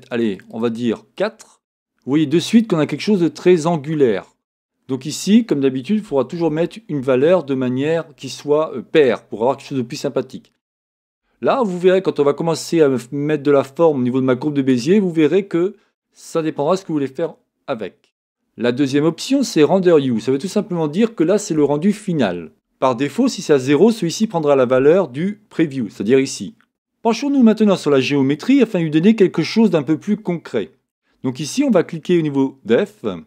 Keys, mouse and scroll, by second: 1.6-28.9 drag.